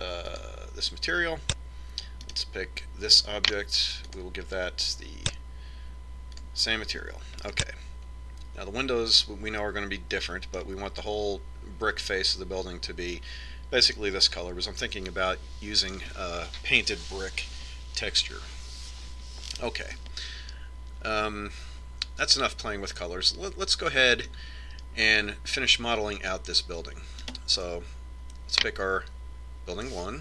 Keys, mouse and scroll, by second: 3.3-5.1 right drag, 5.3-7.0 drag, 8.6-10.6 middle drag, 15.1-17.0 middle drag, 21.1-23.1 middle drag, 28.6-30.2 right drag.